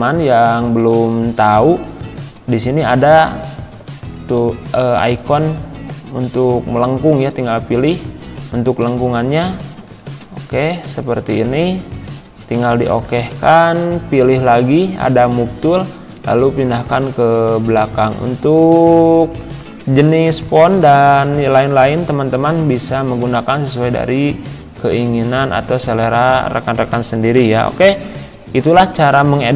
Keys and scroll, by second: 15.8 Right, 16.8 Down, 18.7 Right, 20.3 Down, 20.8 Left, 21.5 Right, 21.9 Left.